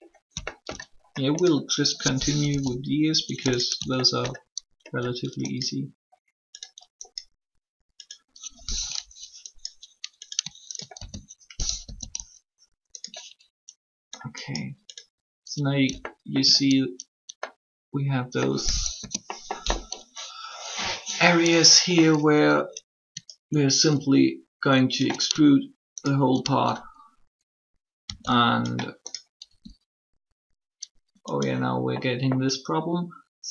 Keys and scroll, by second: 2.5 1, 11.7 typing, 13.0 typing, 18.8 3, 28.0 e, 29.4 s.